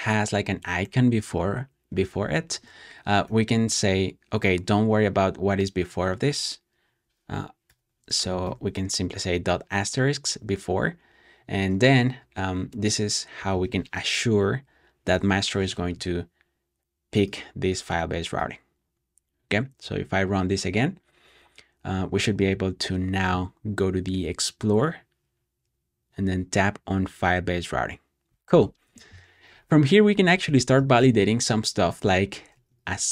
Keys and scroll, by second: 0.2 typing, 1.8-3.2 typing, 5.8 typing, 7.6 shift+8, 8.4 super+s, 11.3 ⟲, 13.3 super+j, 15.0 Return, 29.3 typing, 30.6-33.1 typing.